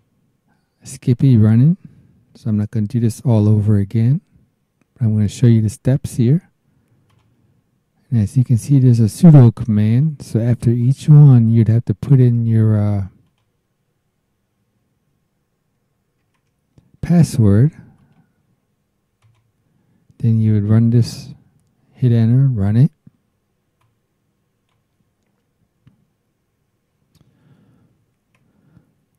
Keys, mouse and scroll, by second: 0.0 click, 2.5 BackSpace, 7.1 click, 8.6-10.2 drag, 11.5 right click, 13.2 click, 16.2 alt+Tab, 18.0 right click, 19.2 click, 23.8 click, 25.8 BackSpace.